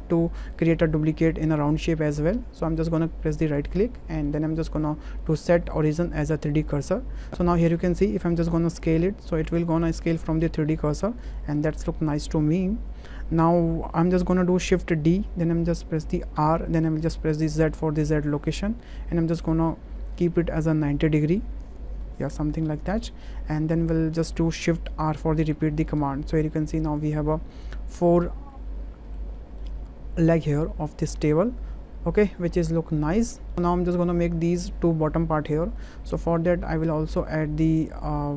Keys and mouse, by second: 3.6-7.3 right drag, 8.8 s, 11.2 right click, 15.1 shift+d, 16.4 r, 17.6 z, 20.2 ctrl+click, 21.2-23.6 drag, 25.1 shift+r, 25.5 shift+r, 26.2-27.1 drag, 27.4 shift+drag, 27.8-28.3 drag, 28.6-29.6 drag, 30.6 middle click, 31.2 shift+middle drag, 31.4-33.3 middle drag, 35.6 middle click, 36.2 shift+a.